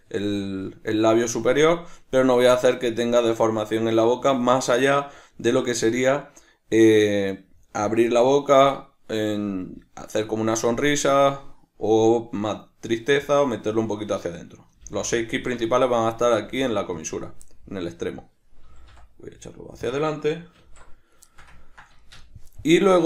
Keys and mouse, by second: 15.5 right click, 16.4 g, 17.1 click, 17.5-19.9 middle drag, 18.7 g, 19.9 click, 20.6 alt+o, 21.3 ctrl+shift+middle click, 22.0-23.0 shift+middle drag.